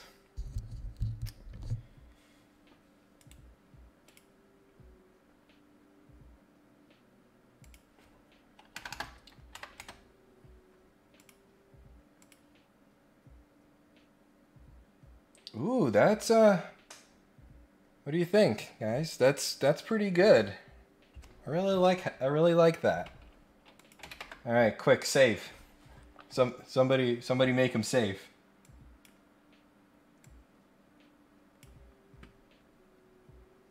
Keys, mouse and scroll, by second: 2.4 scroll up 1, 3.2 right click, 4.0 click, 7.6 click, 11.1 click, 12.2 click, 23.8 click, 28.6 click, 30.2-31.6 drag, 32.3 scroll up 1, 32.7-33.6 scroll down 3, 33.6 scroll up 1.